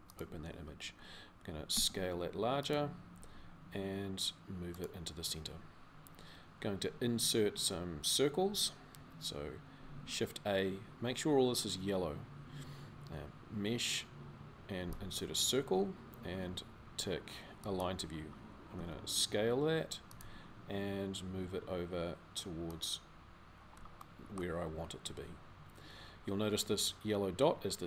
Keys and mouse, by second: 3.0 g, 9.6 shift+a, 18.5 s, 20.0 g.